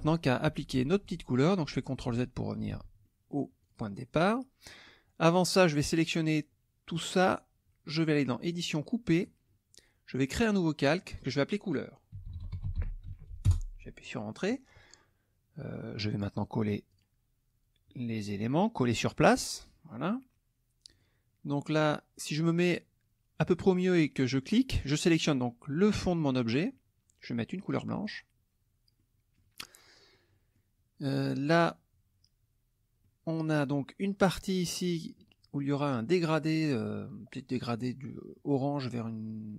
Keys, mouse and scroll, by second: 3.0 ctrl+middle click, 3.6 click, 4.2 click, 4.7 middle click, 5.3-7.1 drag, 8.4 click, 9.2 click, 10.8 click, 11.9-13.6 typing, 16.9 click, 18.9 click, 20.0 click, 20.9 click, 24.4 click, 28.0 click, 29.0 middle click, 29.0-29.5 scroll up 1, 30.1 middle click, 30.1-30.7 scroll up 1, 31.1 middle click, 31.1-31.8 scroll up 1, 33.0 middle click, 33.0-33.9 scroll up 1.